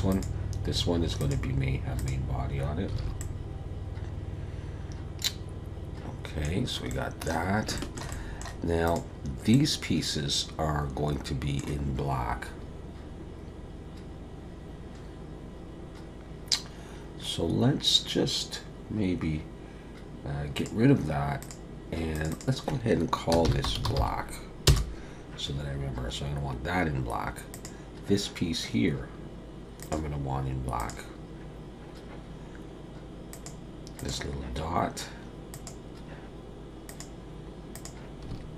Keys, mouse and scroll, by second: 0.1 click, 1.2 click, 3.0 alt+a, 3.2 middle click, 6.6 scroll down 2, 6.9 middle click, 7.5 scroll up 1, 7.7 shift+middle click, 8.1 middle click, 8.8 click, 9.5 middle click, 9.6 scroll up 1, 10.2 scroll up 1, 20.5 click, 21.4 click, 22.1 click, 22.3 click, 27.5 click, 29.8 click, 33.3 click, 33.9 click, 35.5 click, 36.9 click.